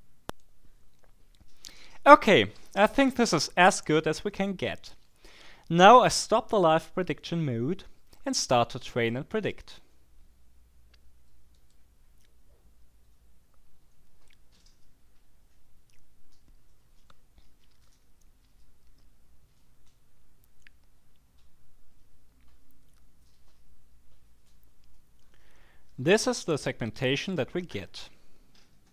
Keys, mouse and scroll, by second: 0.3 right click, 9.0 click, 11.6 click, 26.9 click.